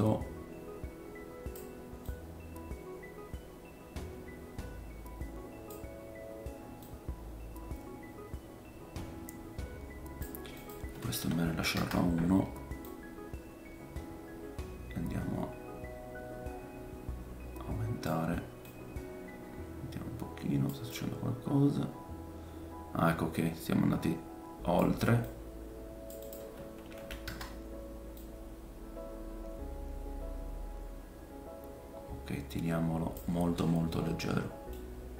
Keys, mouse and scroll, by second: 18.7 click, 20.9 click, 25.2 click, 26.2 click, 28.1 click, 33.9 middle click.